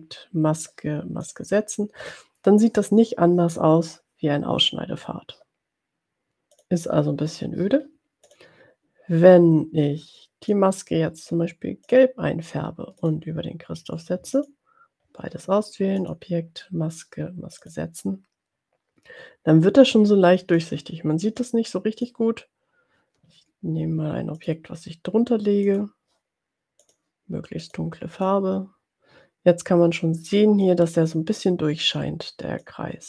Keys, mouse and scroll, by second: 1.6 click, 6.8 click, 8.4 click, 10.8 click, 12.0 click, 13.0 shift+click, 14.5 shift+click, 16.1 click, 18.0 click, 20.6 click, 21.5 click, 24.4 click, 25.8 click, 26.8 click, 27.6 click, 28.4-30.9 drag, 32.7 click.